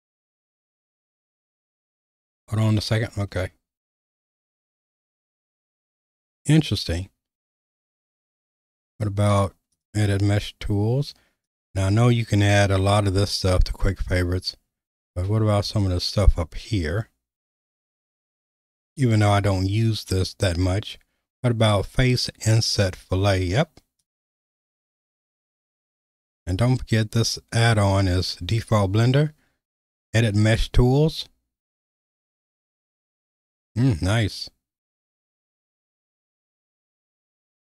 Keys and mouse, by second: 4.2 q, 9.8 click, 11.5 click, 15.7 click, 22.7-24.1 right drag, 25.2 q, 32.7 click, 36.9 click.